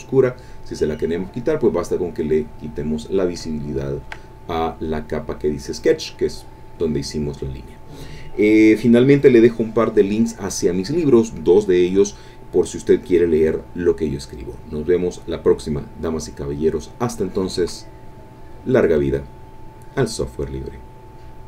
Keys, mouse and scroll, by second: 2.2 click, 3.5 ctrl+click.